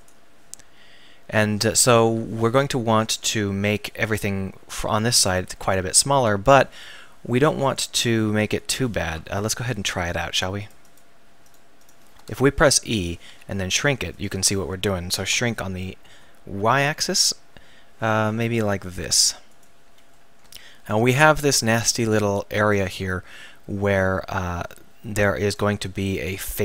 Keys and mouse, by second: 6.1 ctrl+r, 8.7-13.4 right drag, 9.4 ctrl+z, 12.6 e, 13.3 s, 15.3 s, 19.6 click, 25.5-26.6 middle drag.